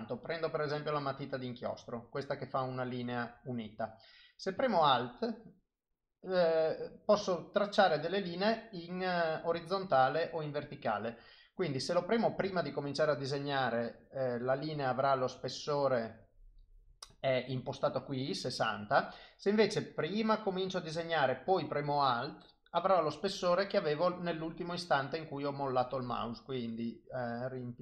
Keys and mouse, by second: 1.3 click, 4.7 alt+click, 7.2 click, 9.2 click, 12.6 alt+click, 20.0 click, 24.9 click.